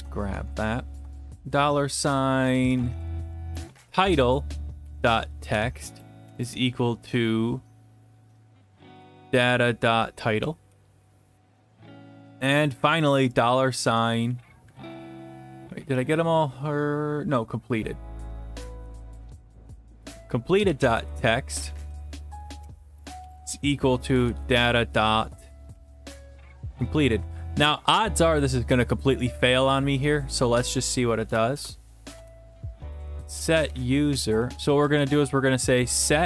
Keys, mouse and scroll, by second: 0.0 ctrl+c, 0.1 ctrl+v, 0.4 alt+Tab, 2.6 Down, 2.7 Down, 2.9 Down, 3.1 Down, 3.2 Down, 3.5 Return, 4.8-6.3 typing, 8.5-11.8 typing, 12.7 Down, 12.9 Down, 13.0 Down, 13.2 Down, 13.8 Down, 13.9 Down, 14.1 Down, 14.3 Down, 14.9 Up, 15.8 Escape, 17.4 click, 17.5 click, 18.6 typing, 19.7 Return, 20.3-26.4 typing, 28.4-30.7 drag, 30.9 click, 31.6 Return, 32.1-36.2 typing.